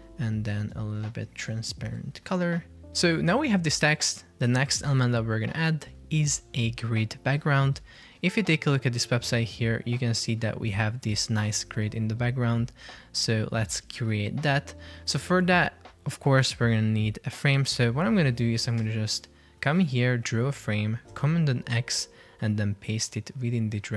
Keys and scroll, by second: 9.0 super+Tab, 14.0 super+Tab, 21.2 super+x.